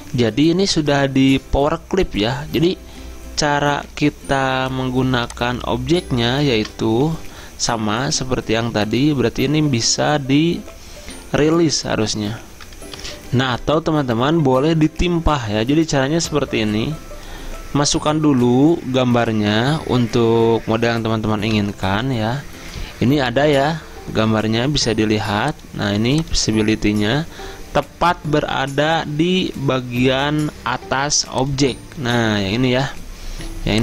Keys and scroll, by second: 6.6 ctrl+z, 13.0 F10, 13.1 F10, 21.6 Return.